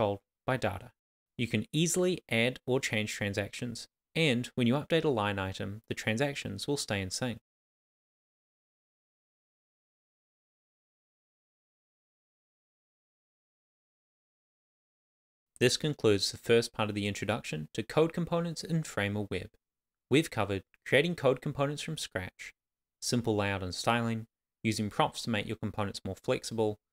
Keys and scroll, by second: 14.8 super+d, 18.3 shift+., 18.4 shift+,, 18.7 shift+., 18.8 Left, 19.5 shift+[, 19.6 Left, 20.1 Tab, 22.5 super+s, 26.5 super+s.